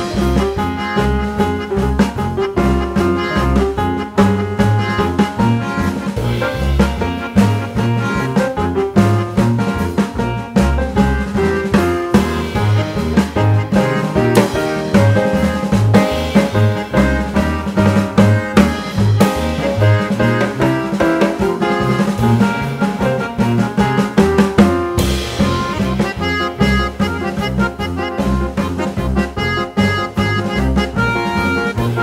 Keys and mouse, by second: 0.2-2.2 drag, 1.4 right click, 2.8 click, 4.1 click, 4.2-5.7 shift+drag, 5.2 l, 8.0 click, 9.4-10.6 drag, 11.9 g, 14.7-16.2 drag, 18.7 click, 21.9-23.7 drag, 24.8-26.1 middle drag, 27.4 g, 29.3-30.7 drag.